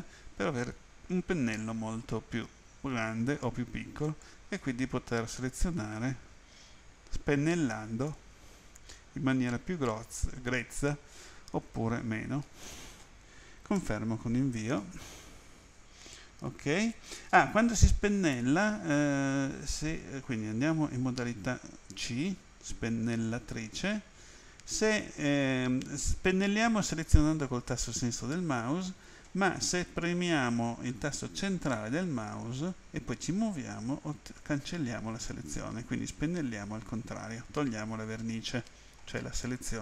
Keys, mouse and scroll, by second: 0.4-0.8 scroll down 3, 1.7-2.2 scroll up 4, 2.3-2.7 scroll down 3, 2.7-3.7 scroll up 3, 12.7 click, 13.8 Return, 18.4 a, 22.0 c, 23.3 click, 31.8 middle click.